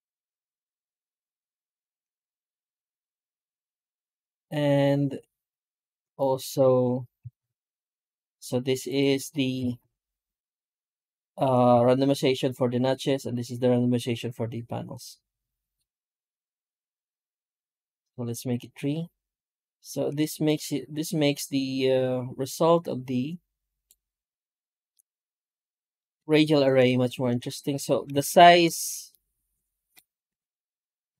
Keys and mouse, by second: 24.8-25.2 middle drag, 25.3 middle click, 25.7 middle click, 27.7 middle drag, 28.2-28.8 shift+middle drag, 29.0-29.8 middle drag, 30.2 F9.